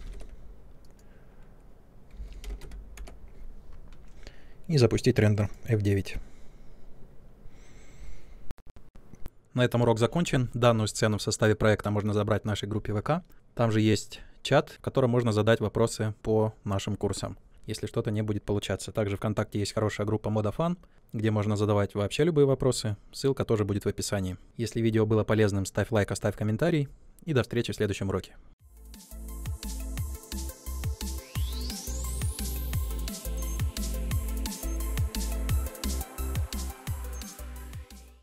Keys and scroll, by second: 2.1-2.9 typing, 2.9 Return.